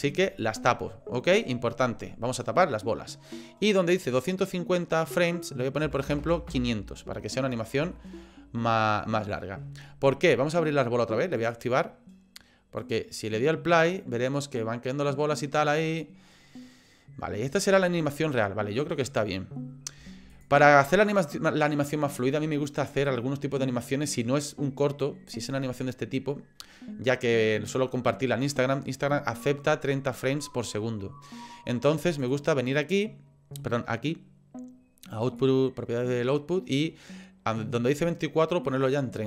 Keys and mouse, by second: 0.3 click, 4.3-6.9 drag, 6.2 KP_0, 8.1 shift+click, 11.4 click, 12.9 click, 14.3-15.5 middle drag, 16.3 middle click, 20.3 click, 21.0 click, 35.2 click, 37.8-38.8 drag.